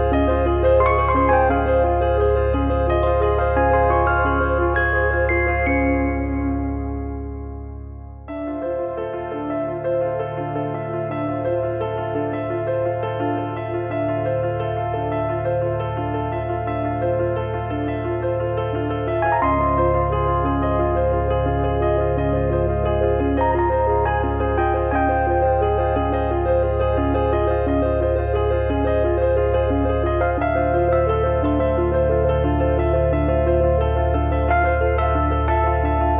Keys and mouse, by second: 1.5 click, 2.7 click, 4.5 middle click, 6.0 shift+b, 6.5 shift+b, 7.0 click, 8.5 middle click, 8.8 click, 10.2 click, 10.4 click, 11.2 click, 12.5 click, 12.7 click, 13.2 shift+middle click, 13.8 click, 17.0 click, 19.0 click, 20.2 click, 21.0 click, 22.3 shift+b, 24.3 e, 24.9 click, 25.2 click, 26.3 click, 27.6 click, 28.6 shift+middle click, 29.2 click, 29.6 click, 31.1 click, 32.2 click, 32.9 click, 33.9 shift+d, 34.3 click, 34.5 click, 35.9 click.